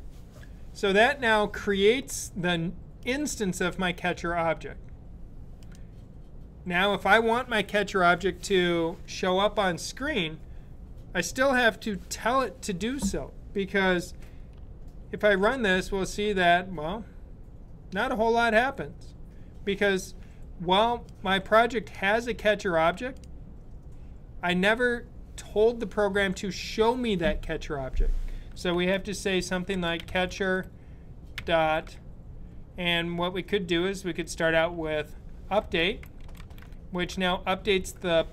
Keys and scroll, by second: 15.1 super+b, 28.6-31.1 typing, 35.0-37.6 typing.